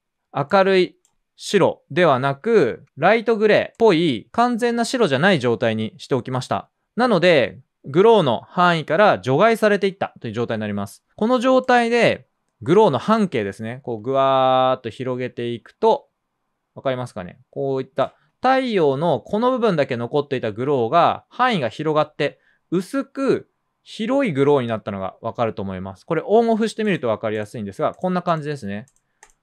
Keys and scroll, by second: 2.6 super+z.